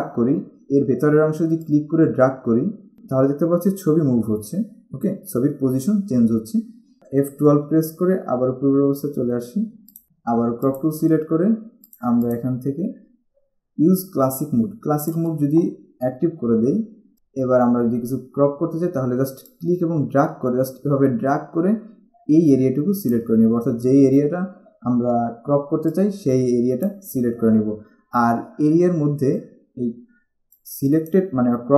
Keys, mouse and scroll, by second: 1.8 click, 8.5 F12, 10.8 click, 12.1 click, 15.2 click, 17.1 click, 19.6 click, 26.0 click, 30.7 click.